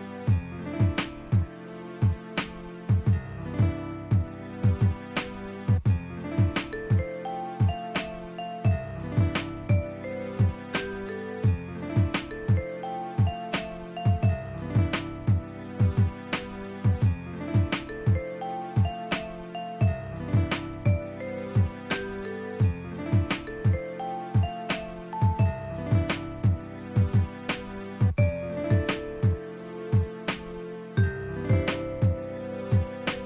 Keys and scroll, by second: 0.4 scroll down 1, 2.2 scroll down 1, 2.3 scroll up 1, 5.5-5.9 scroll up 1, 7.4 ], 10.1 ctrl+z, 12.8 scroll down 1, 13.0 scroll up 1, 15.9 ctrl+z, 16.9 ctrl+z, 17.7 scroll down 1, 18.1 scroll up 1, 18.2 scroll down 1, 18.3 scroll up 1, 19.3 scroll down 1, 21.2-21.5 alt+scroll up 2, 22.0 ctrl+z, 25.7 scroll down 1, 27.5 scroll down 1, 27.6 scroll up 1, 28.6 [, 32.8 scroll down 1, 33.0 scroll up 1.